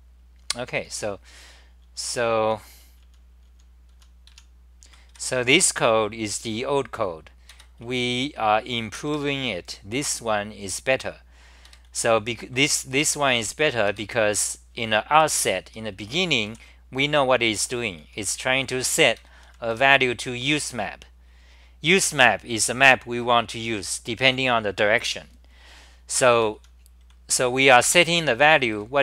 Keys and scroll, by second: 1.4-5.6 typing, 7.5 ctrl+g, 7.8-8.4 c, 9.1 6, 11.6-16.4 typing, 14.2 ctrl+g, 17.8-20.2 typing, 19.2 ctrl+g, 26.3 ctrl+g, 26.6 t, 27.2 c, 27.8 t, 28.0 t.